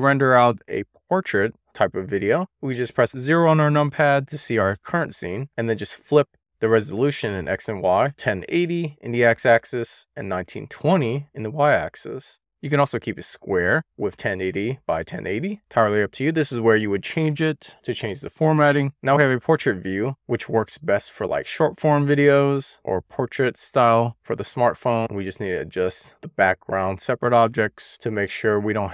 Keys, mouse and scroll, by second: 0.0 click, 7.3-11.7 drag, 16.0 click, 20.7 click, 23.2 w, 24.7 e, 25.1 r, 26.9 click, 28.5 click.